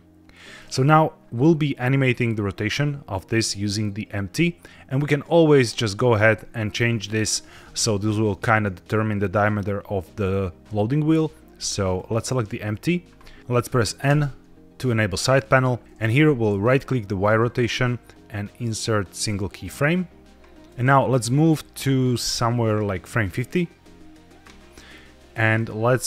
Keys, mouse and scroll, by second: 0.2 click, 4.9 click, 6.1 g, 6.2 z, 7.3 Escape, 11.8 click, 14.0 n, 17.1-19.7 right drag, 22.3-24.1 drag, 25.5-26.0 drag.